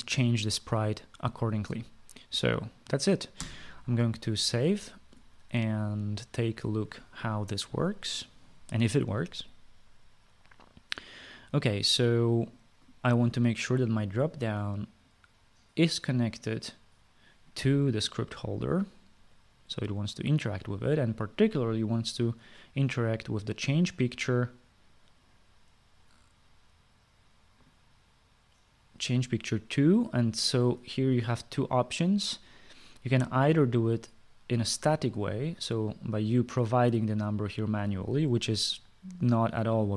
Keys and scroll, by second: 4.0 ctrl+s.